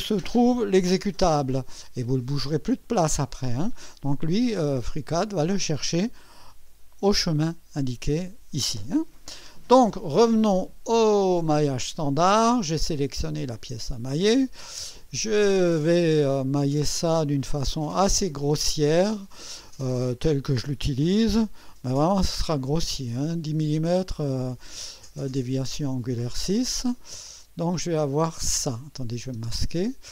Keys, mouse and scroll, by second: 6.6 click, 11.0 click, 17.7-19.6 drag, 22.3 6, 27.3 click, 29.4 space.